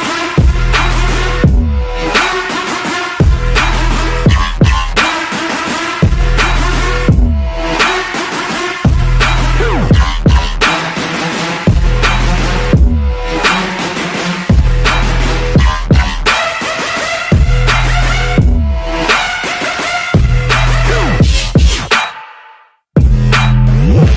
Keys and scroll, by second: 0.9 ctrl+t, 8.3 ctrl+d, 15.8 ctrl+d, 21.3 ctrl+j, 21.5 ctrl+t, 22.0 ctrl+j, 22.1 ctrl+t, 23.6 ctrl+j, 23.8 ctrl+t.